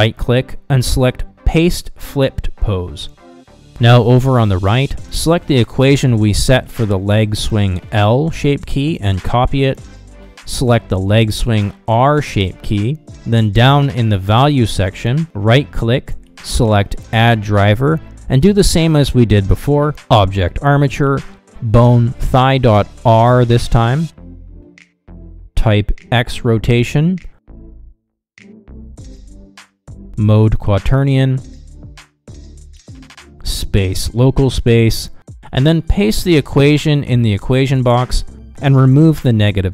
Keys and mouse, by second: 1.1-3.6 right drag, 4.8 click, 8.8-13.4 drag, 14.7-38.5 right drag, 38.5-39.7 drag.